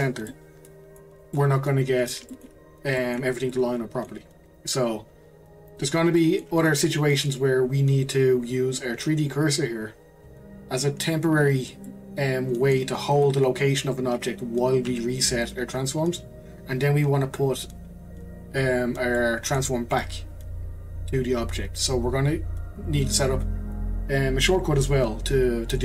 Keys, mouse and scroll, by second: 0.3-5.3 middle drag, 5.3-5.7 scroll up 1, 5.7 click, 6.2-9.6 middle drag, 11.9-13.1 middle drag, 13.1 click, 14.9 q, 19.1-19.9 middle drag, 19.9 click, 25.4-25.8 scroll down 2.